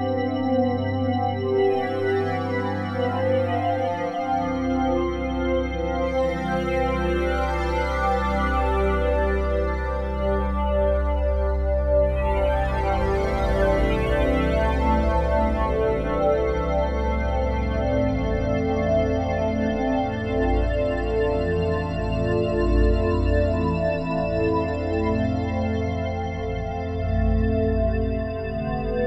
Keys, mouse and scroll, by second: 3.2-19.3 drag, 19.3 alt+a, 19.7 b, 20.1-21.2 drag, 21.2 shift+s, 21.9-27.0 drag.